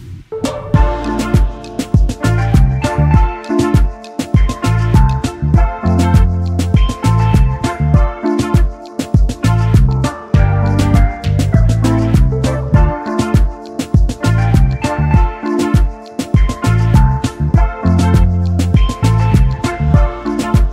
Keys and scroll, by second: 0.9 space, 2.0 ctrl+s, 8.1 ctrl+s, 12.2-13.5 typing, 14.9 r, 19.8 0, 20.0 Return.